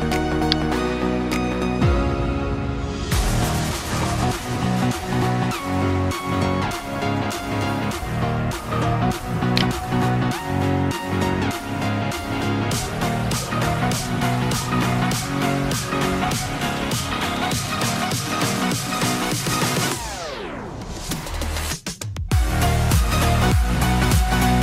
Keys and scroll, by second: 12.2 Delete, 13.6 ctrl+z, 18.5 alt+BackSpace, 20.2 Delete.